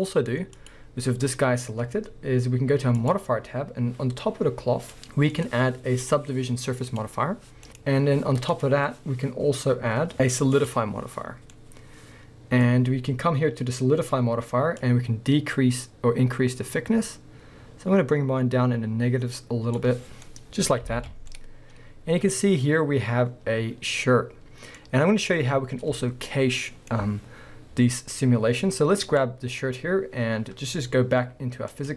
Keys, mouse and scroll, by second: 0.5 click, 1.1-2.9 scroll up 1, 2.9 click, 4.9-7.6 drag, 7.6 middle click, 8.5-11.5 drag, 11.3 scroll down 1, 11.5-14.8 middle drag, 12.6-13.7 scroll up 2, 13.7-14.8 scroll down 2, 14.8-20.3 drag, 20.1 scroll down 2, 20.3-24.2 middle drag, 21.0 alt+a, 21.2 scroll down 2, 24.6-29.1 middle drag, 27.3-29.1 scroll up 2, 29.1 click, 31.7 click.